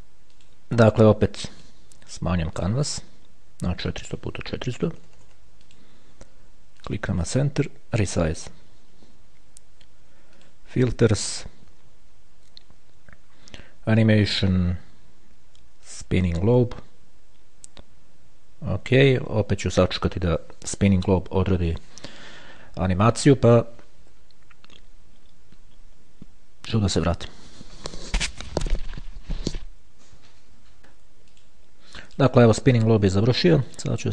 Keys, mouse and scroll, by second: 0.6 click, 1.8 click, 2.8 click, 4.2 click, 5.2 KP_4, 6.0 click, 6.0 KP_0, 7.1 click, 8.6 click, 10.6 click, 16.2 click, 19.2 click, 31.0-32.2 drag, 32.4 click, 34.0 click.